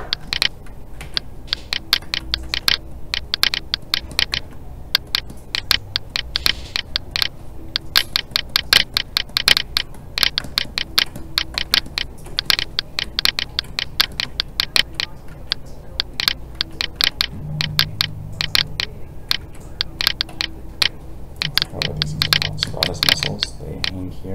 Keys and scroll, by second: 1.0 alt+a, 15.3 alt+a, 19.4 alt+a.